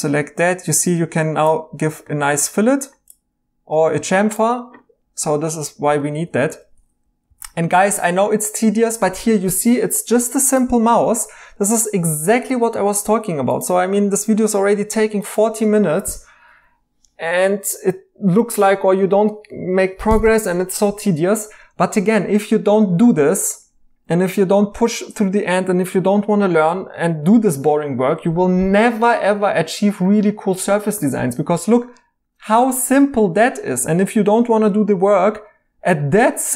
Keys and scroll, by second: 6.1 ctrl+z, 7.3 alt+h.